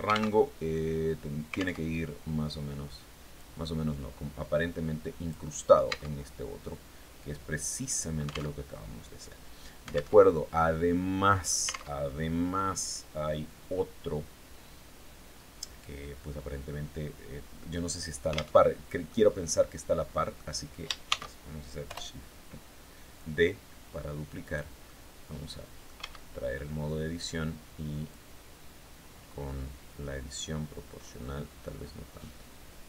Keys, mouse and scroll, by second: 1.2 alt+Tab, 2.8-4.9 drag, 5.3 Tab, 6.1-8.0 drag, 8.0 alt+Tab, 9.6 alt+Tab, 10.0-11.1 drag, 11.4 alt+Tab, 18.0 alt+Tab, 18.5-20.0 drag, 20.5 shift+d, 21.3 Return, 22.6-24.2 drag, 24.3-25.5 drag, 25.4 Tab, 27.5-28.6 drag, 28.6-29.2 scroll down 1, 30.4-30.7 scroll up 1, 31.0-31.3 scroll up 1, 32.0 scroll down 1.